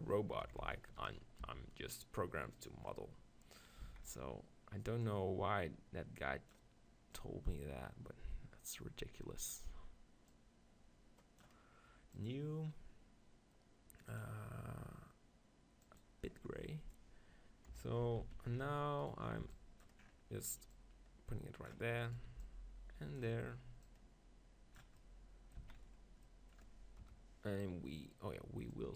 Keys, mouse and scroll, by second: 0.5 KP_7, 0.7 z, 1.2-2.2 middle drag, 1.5 g, 2.7-4.5 drag, 2.9-4.3 middle drag, 3.1-4.3 right drag, 3.9 z, 4.5 middle click, 5.1-7.0 drag, 7.2-9.5 drag, 10.3-16.4 drag, 17.7 KP_7, 18.1 Tab, 18.2 z, 18.6 middle click, 19.0-24.8 right drag, 19.4 b, 20.7 click, 22.1 click, 22.3 b, 22.5 middle click, 23.9-25.7 drag, 23.9 middle click, 25.7-27.0 middle drag, 25.7 z, 27.0 KP_0, 27.3-28.4 middle drag, 28.7-28.9 drag.